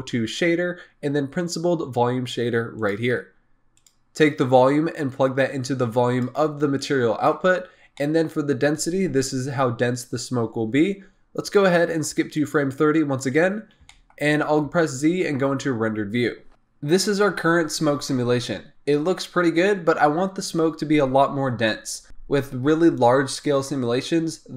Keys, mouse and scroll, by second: 4.6-6.8 drag, 7.6-7.9 scroll up 4, 7.9-12.7 middle drag, 12.7 click, 13.3-13.8 scroll up 6, 13.8-14.6 shift+middle drag, 14.6 z.